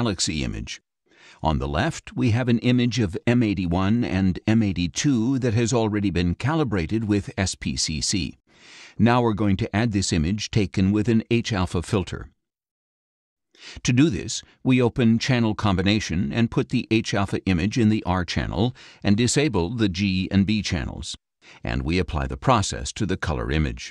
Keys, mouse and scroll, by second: 7.4 click, 9.9 click, 20.0 click, 21.0 click, 22.4-23.9 drag.